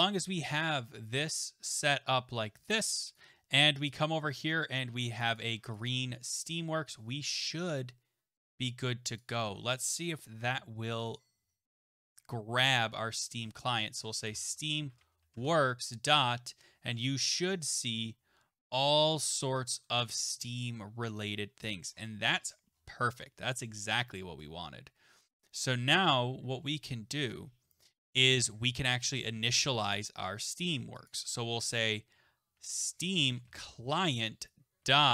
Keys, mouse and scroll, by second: 0.0 click, 0.5 click, 2.7 click, 3.2 click, 4.0 click, 5.2 click, 5.4 click, 5.8 click, 5.9 click, 9.2 click, 10.3 ctrl+s, 13.3 click, 13.7-15.6 typing, 17.4-18.3 scroll down 7, 18.7 scroll down 1, 18.8-20.0 scroll, 20.0-21.3 scroll, 21.3-25.5 scroll, 25.5 click, 25.5-26.0 scroll, 26.0 BackSpace, 28.3 click, 29.1 scroll, 31.1 click, 32.3-34.0 typing.